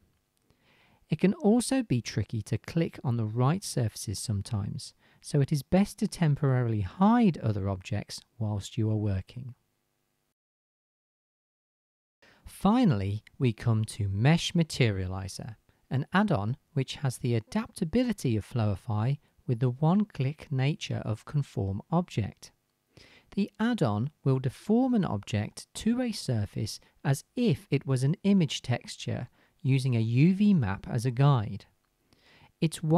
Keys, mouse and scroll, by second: 0.9-1.6 right drag, 2.5 right click, 4.7 click, 5.4 right click, 6.0 h, 6.7 right click, 7.6-8.1 right drag, 10.3 right click, 11.6 alt+h, 12.0-13.3 drag, 13.3-14.6 right drag, 14.6-16.1 drag, 18.6 right click, 18.9-19.3 drag, 19.8-20.2 right drag, 20.9-21.8 right drag, 24.0-25.3 middle drag, 25.3 click, 25.3 right click, 25.8-28.7 middle drag, 28.7-29.2 drag, 29.5 click, 29.7-30.3 shift+right drag, 30.3-32.6 shift+drag, 31.0-32.6 right drag, 32.0 middle click, 32.2-32.6 shift+middle drag.